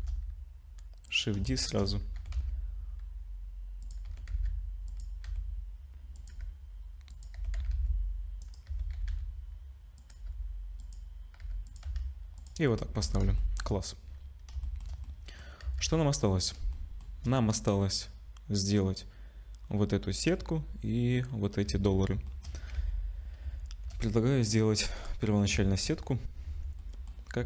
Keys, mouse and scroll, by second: 0.3 shift+d, 1.5 shift+middle click, 1.8-2.2 scroll up 4, 2.2 r, 4.1 r, 6.3 r, 6.3 g, 7.4 r, 8.7 r, 10.2 g, 11.4 g, 11.9 z, 12.4 click, 12.6-13.0 scroll down 5, 13.0 ctrl+s, 13.4 shift+middle click, 14.6 shift+middle click, 15.0 middle click, 15.6 z, 16.0-16.6 scroll down 3, 16.6 scroll down 1, 16.7 shift+middle click, 21.7 z, 22.3 shift+middle click, 22.8 ctrl+s, 23.7 shift+a, 25.0 click, 25.3 middle click, 25.5 Tab, 26.5 Tab, 26.8 middle click, 27.1-27.4 scroll down 3.